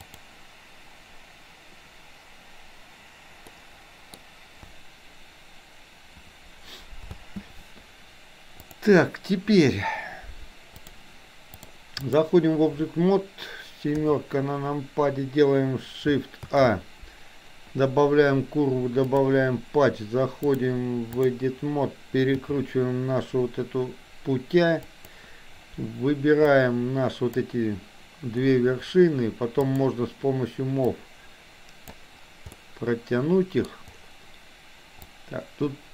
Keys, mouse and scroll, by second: 0.0 click, 3.6 middle click, 7.0 space, 8.6 click, 11.5 click, 14.0 KP_7, 16.4 shift+a, 20.5 click, 22.4 r, 26.5 click, 29.7 click, 30.9-31.9 drag, 32.6-33.6 middle drag, 35.2 click.